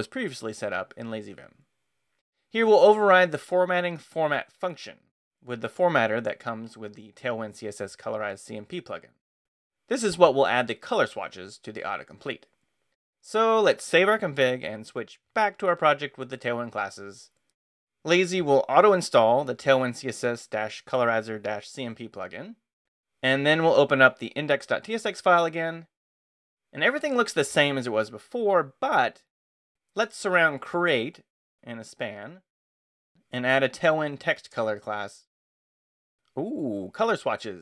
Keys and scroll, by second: 13.8 Escape, 14.0-18.3 typing, 15.4 Return, 24.1-28.2 typing, 29.5-37.6 typing, 34.5 Return.